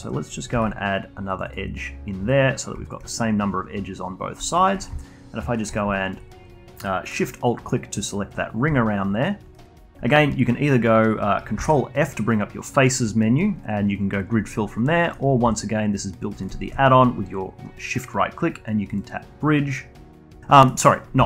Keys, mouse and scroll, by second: 0.5 ctrl+r, 2.8 shift+click, 4.4 alt+click, 4.7 a, 4.9 a, 5.5 alt+shift+click, 5.9-10.2 alt+drag, 10.2-12.1 alt+middle drag, 12.1 ctrl+f, 15.5 middle click, 17.0-20.6 shift+right drag, 20.6 middle click, 21.2 a.